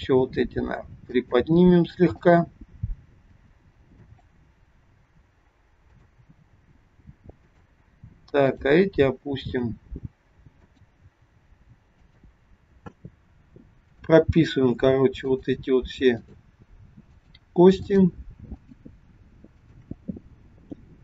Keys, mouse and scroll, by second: 0.2 g, 2.2 click, 3.3 g, 5.9 click, 6.5 g, 8.4 click, 9.5 g, 11.2 g, 13.8 click, 15.1 shift+click.